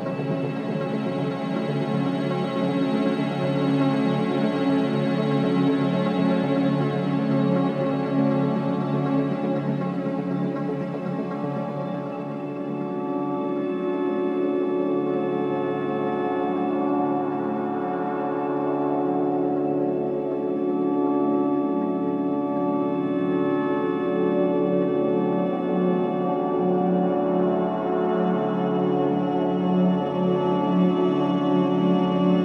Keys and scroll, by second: 7.7 4, 11.9 3, 22.3 4, 27.3 3, 28.3 F1, 30.4 4.